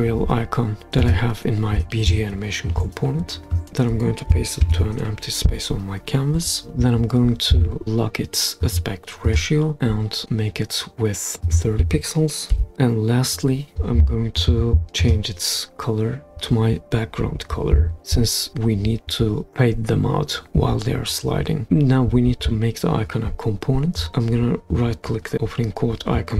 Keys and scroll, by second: 4.6 super+v, 12.5 3.